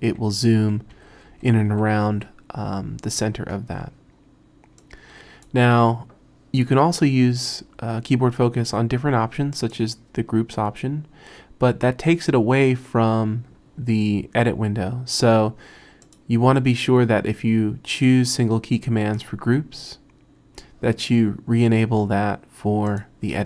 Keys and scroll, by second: 0.0-2.7 typing.